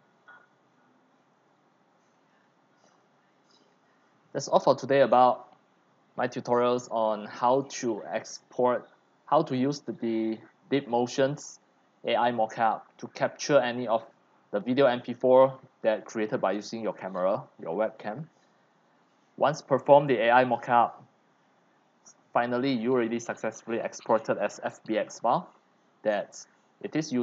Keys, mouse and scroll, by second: 2.1 click, 3.0 click, 3.6 click.